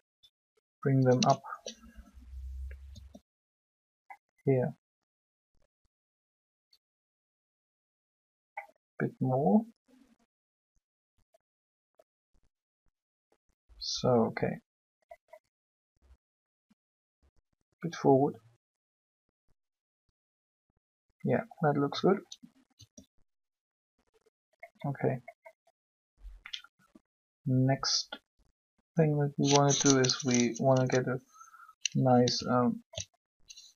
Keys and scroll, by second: 2.9 shift+r, 22.7 r, 30.3 Up.